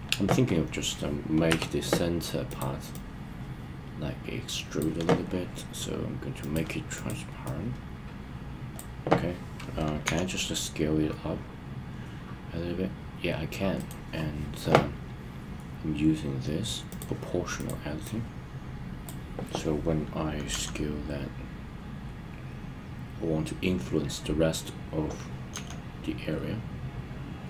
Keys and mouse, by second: 1.5 Tab, 2.5 click, 2.9-4.8 drag, 6.4 click, 7.5-8.7 drag, 13.7 right click, 16.8 click, 17.6 click, 18.2-19.0 drag, 20.4 s, 25.5 s.